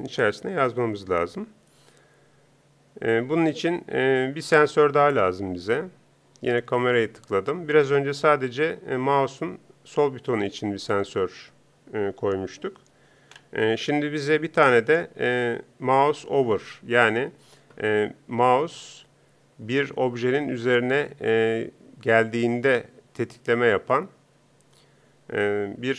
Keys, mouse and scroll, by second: 7.3 click.